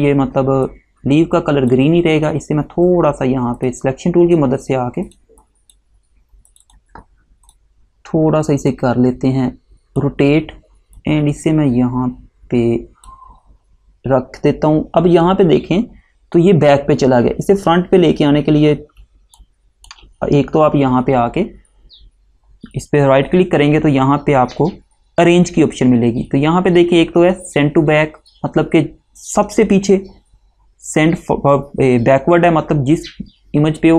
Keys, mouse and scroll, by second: 18.2 scroll up 1, 19.1 space, 19.5 click, 19.6 space, 22.7 right click.